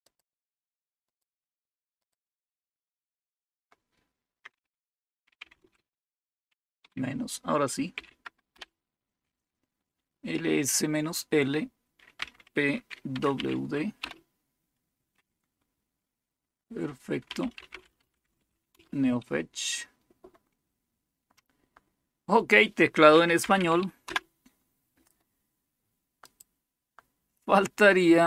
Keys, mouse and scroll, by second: 0.0 click, 1.0 click, 2.0-3.2 drag, 5.0-6.7 typing, 7.9 typing, 8.4 Return, 12.1-13.3 typing, 14.1 Return, 17.0-18.9 typing, 22.8-24.1 typing, 26.2 click, 26.2 typing.